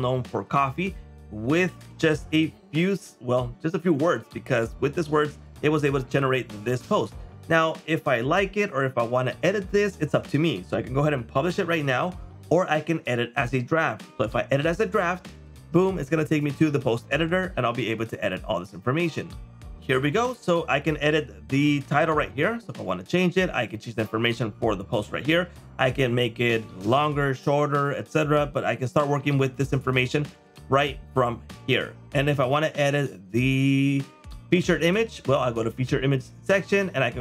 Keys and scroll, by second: 4.6 super+m, 21.9 super+m, 22.7 super+m, 29.2 super+m.